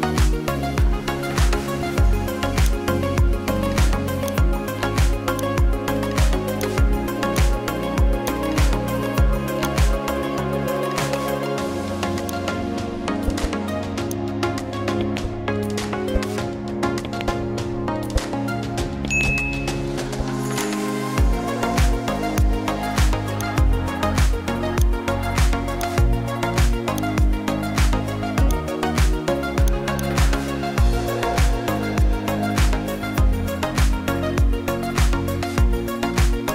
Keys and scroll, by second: 17.2 ctrl+j.